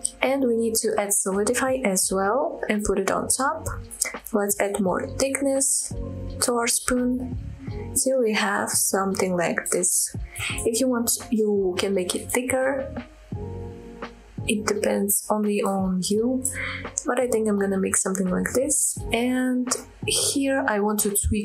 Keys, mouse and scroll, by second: 0.6-2.1 drag, 2.5-2.8 middle drag, 3.0 scroll up 1, 3.3-3.7 middle drag, 3.8-4.5 scroll up 1, 5.0-5.5 drag, 6.6-10.5 shift+drag, 10.6 scroll down 1, 10.9-13.0 middle drag, 13.1-13.7 middle drag, 13.8-14.2 scroll up 2, 14.2-14.9 middle drag, 15.3 KP_7, 15.7-16.2 scroll down 1, 16.3 shift+middle click, 16.7-17.2 scroll up 1, 17.2 Tab, 18.3-18.6 scroll down 2, 19.6 click, 20.1-21.4 scroll up 2.